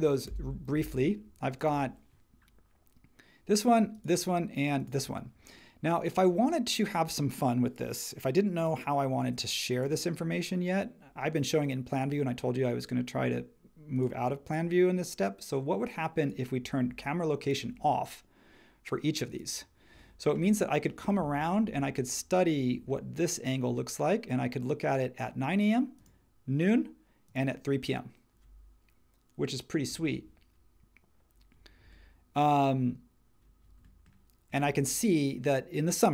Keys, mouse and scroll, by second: 0.2 Return.